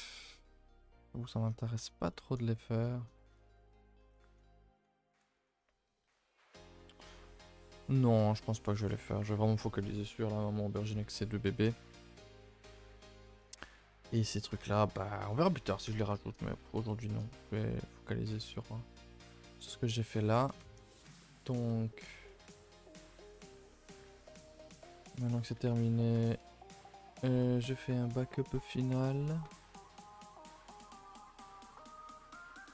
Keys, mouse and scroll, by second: 0.8-1.4 scroll up 3, 1.4-2.1 scroll down 5, 2.1 shift+middle click, 2.4-2.8 scroll down 2, 2.8 shift+middle click, 3.0-3.4 scroll up 2, 3.4 shift+middle drag, 3.7-4.1 scroll down 2, 4.1-4.5 shift+middle drag, 4.5-4.8 scroll up 1, 4.8 a, 4.9 a, 12.0-12.3 shift+middle drag, 12.3-12.9 scroll up 7, 15.2 scroll down 5, 15.5 a, 15.7 a, 16.2-16.5 scroll down 2, 16.5-19.6 shift+middle drag, 19.6-23.1 drag, 23.1-23.4 scroll up 2, 23.7 shift+middle drag, 23.8-24.3 scroll up 2, 24.3 middle drag, 24.5 scroll down 2, 24.7-25.0 scroll up 5, 25.1 middle click, 25.3-26.4 scroll up 2, 26.4 a, 27.3 shift+d, 31.2 m.